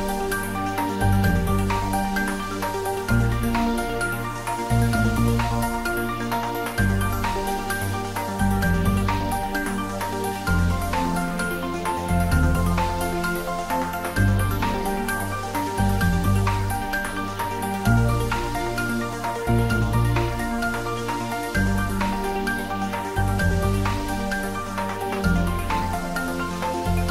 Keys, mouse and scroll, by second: 0.3 Tab, 0.6 middle click, 1.0 click, 1.2-3.3 middle drag, 4.5 Tab, 4.9 ctrl+middle click, 5.8 click, 6.4 middle click, 7.3 click, 7.9 shift+d, 8.2 z, 10.1 click, 10.4-11.3 typing, 12.1 click, 13.2 ctrl+z, 14.2 click, 14.8 s, 15.4 click, 15.7 Tab, 16.2 shift+z, 16.4-18.0 drag, 18.0 f, 18.6 click, 18.8 ctrl+z, 19.3-20.1 typing, 22.0-24.0 drag, 24.0 g.